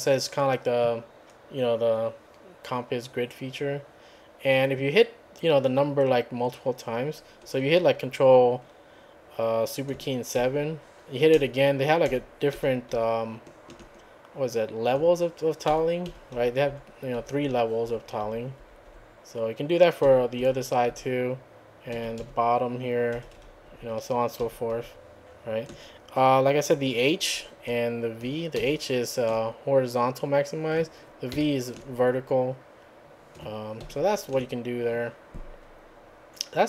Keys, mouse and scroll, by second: 10.4 ctrl+super+KP_7, 11.4 ctrl+super+KP_7, 12.1 ctrl+super+KP_7, 15.7 ctrl+super+KP_7, 20.1 ctrl+super+KP_9, 22.0 ctrl+super+KP_3, 23.2 ctrl+super+KP_1, 24.5 ctrl+super+KP_2, 28.5 ctrl+super+h, 31.3 ctrl+super+v, 33.8 ctrl+super+KP_6.